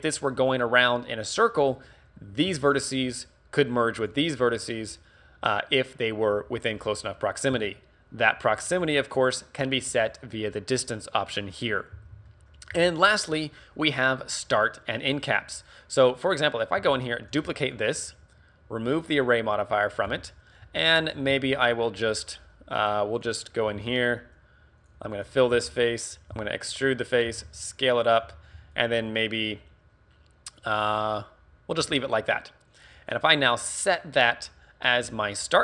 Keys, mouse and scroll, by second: 20.0 d, 20.3 Tab, 20.3 click, 20.7 a, 21.4 ctrl+r, 23.3 right click, 23.8 ctrl+Tab, 25.2 alt+right click, 25.6 f, 26.3 e, 27.3 click, 27.3 s, 28.2 click, 28.2 a, 28.8 alt+right click, 31.9 Tab, 33.1 right click.